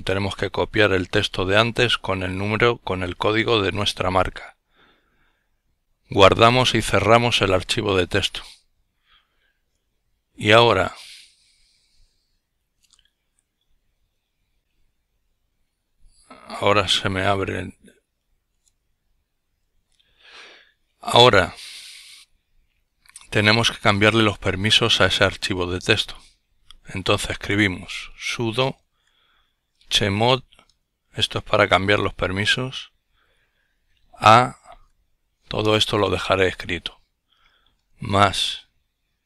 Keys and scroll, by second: 26.7-30.4 typing, 33.9 typing, 35.2 a, 37.0 typing.